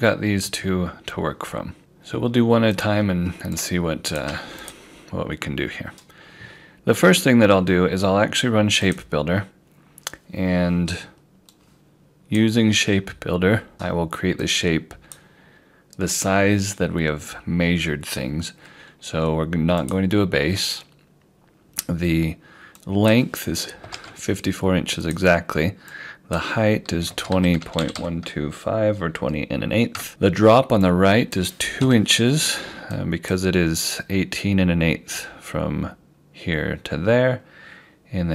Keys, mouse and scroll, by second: 1.8 click, 7.0 scroll up 1, 8.9 click, 19.8 click, 23.9 5, 25.1 click, 26.8-28.2 typing, 30.0 Return, 30.9 click, 31.9 2, 33.0 click.